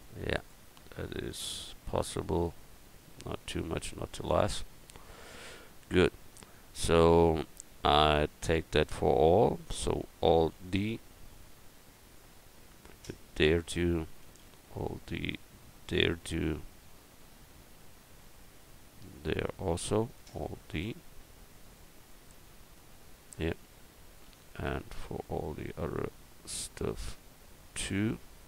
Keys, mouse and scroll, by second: 1.2-2.9 drag, 2.9 s, 10.4 alt+d, 11.3-13.6 drag, 14.2 alt+d, 14.7-16.4 drag, 20.2 alt+d, 20.8-22.5 drag, 24.1 alt+d, 24.9-26.8 drag.